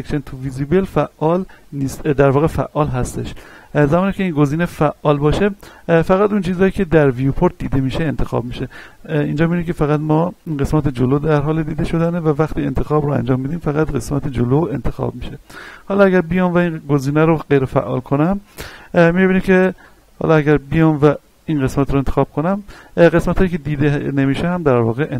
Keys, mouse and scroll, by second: 7.2-7.6 scroll up 1, 8.4 a, 11.8 b, 12.3 click, 13.4-16.4 middle drag, 16.4 click, 19.9 a, 20.8 b, 21.3-23.5 drag, 23.5-25.1 middle drag.